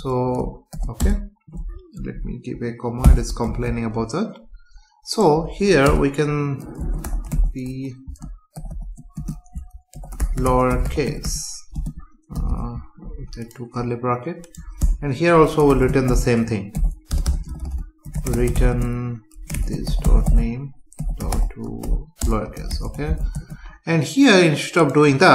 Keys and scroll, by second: 1.0 Return, 2.0 Down, 3.4 ctrl+s, 7.6 Return, 9.2 space, 11.7 space, 14.8 Tab, 17.1 BackSpace, 18.7 space, 22.2 Return, 23.3 ctrl+s.